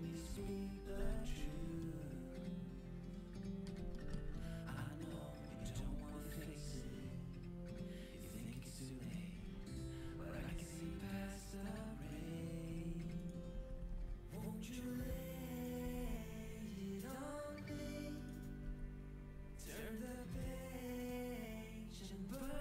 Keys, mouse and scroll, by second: 1.4-3.8 middle drag, 3.9 middle click, 4.8-6.6 right drag, 5.5 g, 8.9-10.2 right drag, 9.3 g, 10.5 right click, 12.1 right click, 12.6 z, 13.5 z, 13.7 g, 15.8 g, 18.3 g, 21.0 middle click, 21.5 middle click.